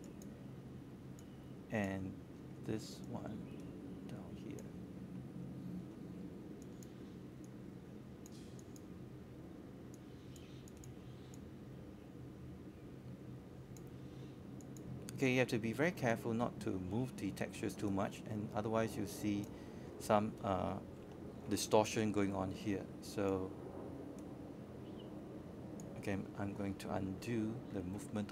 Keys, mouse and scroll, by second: 4.2-4.8 scroll up 2, 5.0-5.3 alt+scroll down 1, 5.5 alt+middle click, 6.4 alt+middle click, 7.2 alt+middle click, 8.5-11.9 drag, 14.6-15.9 right drag, 16.3 click, 17.5 w, 18.2-26.9 drag, 27.0-27.7 scroll up 1, 27.7-28.3 drag.